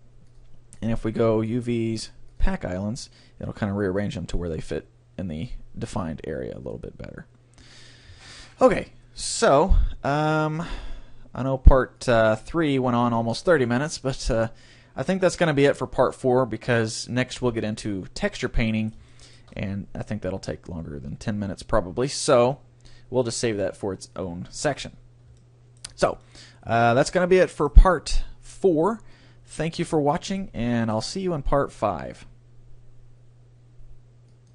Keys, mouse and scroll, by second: 0.3-2.9 drag, 12.0-13.8 drag, 17.6 Tab, 18.2-23.4 middle drag, 25.4-28.0 middle drag, 29.8-31.6 middle drag.